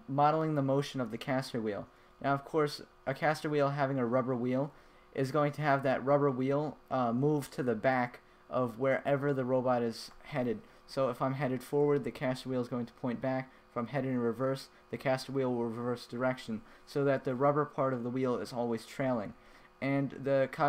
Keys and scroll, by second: 0.3 a, 1.2 w, 2.6 a, 3.3 w, 5.1 a, 6.2 w, 6.8 a, 7.5 w, 9.0 a, 9.9 w, 12.4 a, 13.1 s, 17.0 w, 18.3 w, 18.9 a, 19.8 d.